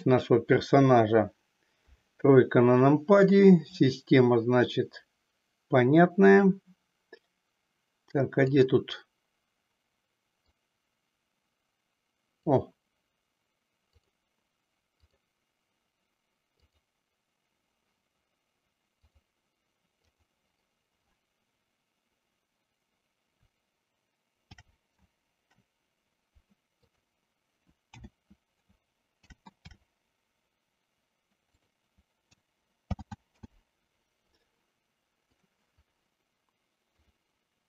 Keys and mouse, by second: 1.6 KP_3, 3.7-6.4 drag, 8.3 click, 10.4-12.6 drag, 13.9-15.2 drag, 16.5 click, 20.2 click, 24.3 ctrl+g, 29.2 ctrl+g, 32.9 alt+g, 33.6 alt+r, 37.1-37.6 drag.